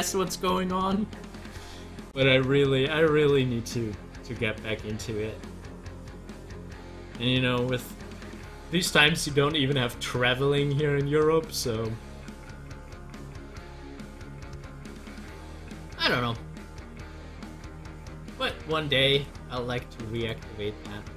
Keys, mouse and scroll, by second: 0.5 scroll down 1, 1.3 middle click, 2.3-2.8 scroll down 2, 5.6 click, 10.3 scroll up 1.